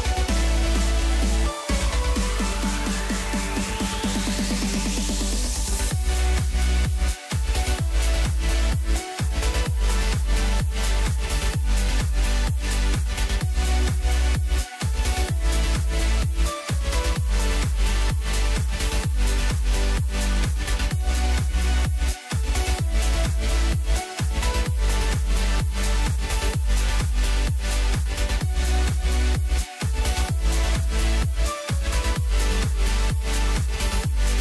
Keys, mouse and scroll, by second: 0.3 shift+click, 1.6 ctrl+l, 4.1 drag, 4.4-5.7 scroll down 6, 5.7 KP_1, 6.7-7.5 ctrl+KP_8, 8.1 ctrl+KP_8, 8.4 ctrl+KP_8, 9.2 ctrl+KP_4, 9.3 ctrl+KP_4, 9.5 ctrl+KP_4, 9.8 ctrl+KP_4, 10.6 scroll down 2, 10.9-12.6 middle drag, 12.6-13.1 scroll up 5, 13.4-16.2 middle drag, 16.2 scroll down 2, 16.5-17.1 middle drag, 17.1 scroll down 2, 17.4-18.4 middle drag, 18.4 click, 18.9-20.1 scroll down 5, 20.1-21.5 drag, 22.2-24.8 middle drag, 24.8-25.7 scroll up 6, 25.7-26.1 scroll down 2, 26.1-28.6 middle drag, 28.6 KP_1, 29.4 scroll up 3, 30.9-31.3 scroll down 3, 31.3-33.1 middle drag, 33.1-33.5 scroll down 2, 33.5-34.4 middle drag.